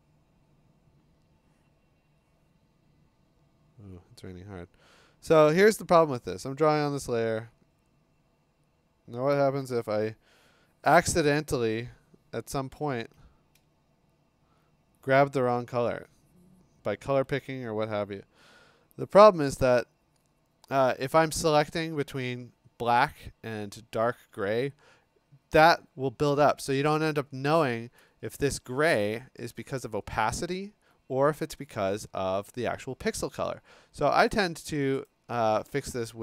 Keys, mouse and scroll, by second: 8.8-11.9 drag, 14.3-15.5 alt+drag, 18.2 click, 28.1 click, 28.3-29.3 scroll, 30.2 scroll, 34.3 click, 35.1 click, 35.7 click.